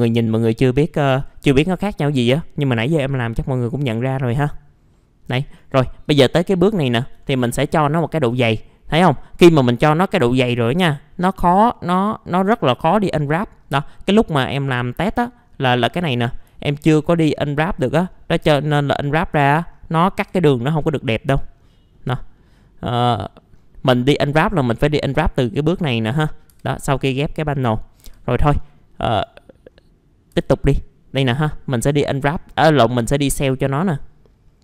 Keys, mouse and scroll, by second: 0.9-1.9 middle drag, 2.2 F4, 3.2 click, 4.4 middle click, 5.4 click, 6.8 alt+middle click, 7.4 scroll up 1, 8.0 F4, 13.1-15.2 scroll down 1, 15.2 scroll up 1, 15.8 click, 16.4 middle click, 17.0 scroll up 1, 18.1 middle click, 18.4 F4, 18.7-19.4 scroll up 1, 19.4 scroll down 1, 19.7-20.2 scroll up 1, 20.2 F4, 20.9-21.9 scroll down 1, 21.9 middle click, 22.9-23.5 scroll up 1, 23.5-23.9 scroll down 1, 23.9 middle click, 24.7 click, 26.1 middle click, 26.1-26.5 scroll down 1, 26.5 F4, 26.7-27.3 scroll up 1, 27.5 middle click, 28.0 F4, 28.3 scroll up 1, 29.1 click, 29.7 scroll up 1, 30.3 F4, 31.3 middle click, 32.3-32.9 scroll down 1, 32.9-33.2 scroll up 1, 33.2 middle click, 33.3 scroll down 1, 34.0 middle click.